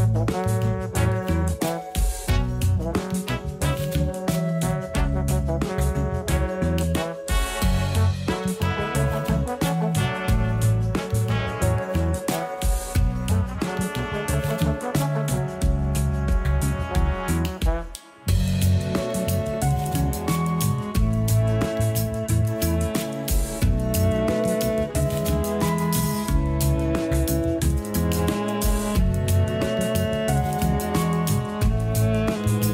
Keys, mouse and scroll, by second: 2.0 KP_1, 2.5 a, 3.1 s, 6.7 a, 6.9 a, 7.3 Tab, 8.1-9.8 middle drag, 9.8 KP_1, 10.3 shift+a, 13.3 ctrl+3, 13.9 right click, 15.1 g, 17.8 Tab, 18.8 Tab, 19.9 click, 20.4 Tab, 21.0 a, 21.2 a, 21.6 ctrl+r, 23.8 a, 24.8 s, 28.9 s, 30.7 scroll up 2, 31.0 shift+middle click, 31.7 scroll up 1, 32.5 a.